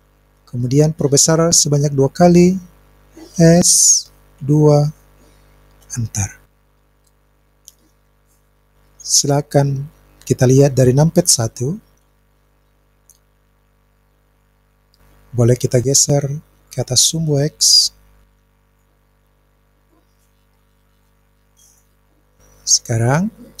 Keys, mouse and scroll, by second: 4.4 KP_2, 5.8 Return, 12.1 KP_1, 15.5 click, 16.7 click, 19.9-21.8 drag.